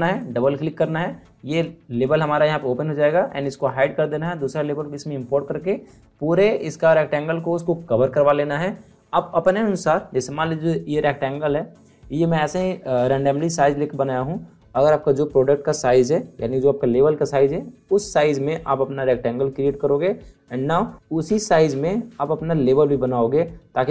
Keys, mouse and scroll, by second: 1.3 click, 3.5 click.